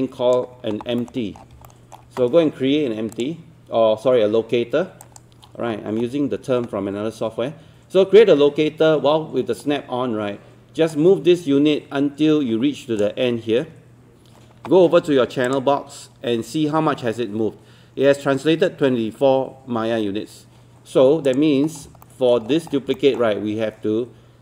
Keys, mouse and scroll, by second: 1.0 alt+middle click, 1.2 scroll down 1, 1.7-2.8 alt+middle drag, 3.1-13.8 drag, 21.7 scroll down 1, 22.1 alt+middle click, 22.5 scroll down 1, 23.0 alt+middle click.